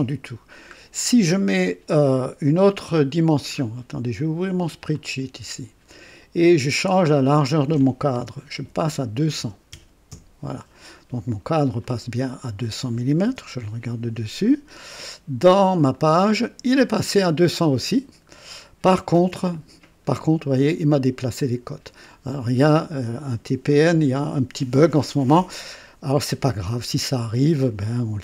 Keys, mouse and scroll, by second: 3.5 scroll up 1, 4.9 click, 7.1 click, 8.5 KP_2, 8.8 KP_0, 9.3 KP_0, 10.1 Return, 11.8 click, 13.2 KP_2, 15.9 click, 18.3 scroll down 1, 27.5 click.